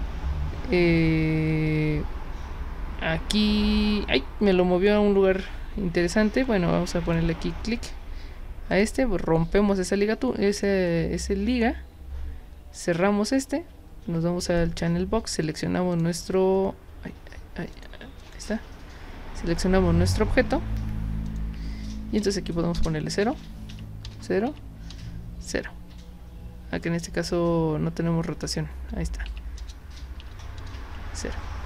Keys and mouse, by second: 7.1 click, 8.7 click, 12.8 click, 14.5 click, 15.9 click, 17.7 click, 18.2 click, 21.3 click, 23.2 Tab, 23.7 Tab, 24.5 Tab, 29.2 Tab, 30.2 Tab, 30.8 Tab.